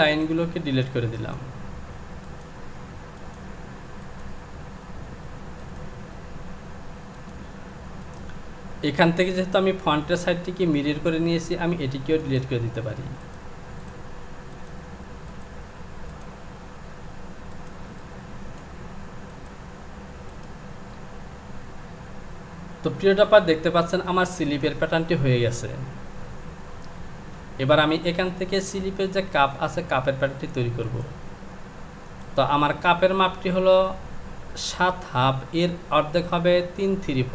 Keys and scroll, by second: 0.0 Delete.